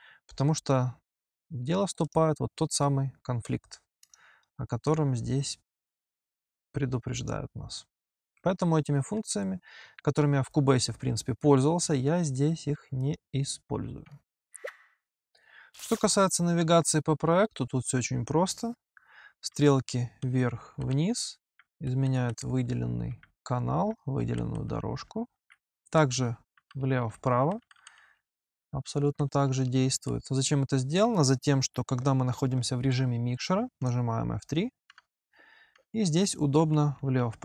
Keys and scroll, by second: 19.3 g, 19.3 Up, 20.0 Down, 20.9 Up, 21.7 Down, 22.5 Up, 24.0 Down, 24.8 Up, 25.9 Right, 26.7 Left, 27.3 Right, 28.0 Left, 28.7 Right, 29.3 Left, 34.7 Left, 34.7 F3, 35.6 Right, 36.8 Left.